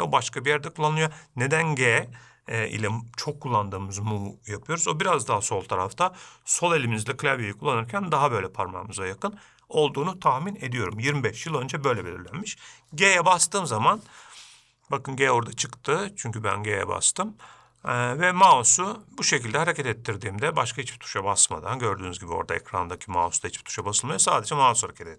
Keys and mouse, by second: 13.7 g.